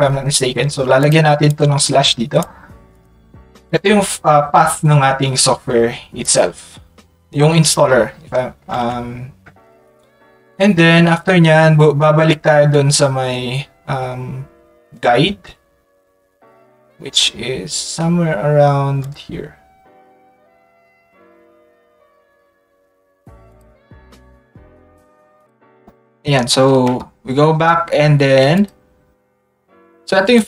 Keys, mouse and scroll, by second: 1.0 click, 1.4 click, 2.9 click, 3.6-6.2 drag, 4.3-6.2 right drag, 8.7 Tab, 9.5 Tab, 19.0 click, 21.1 middle click, 25.4 click, 28.5 click, 29.0 middle click, 30.3-30.4 drag.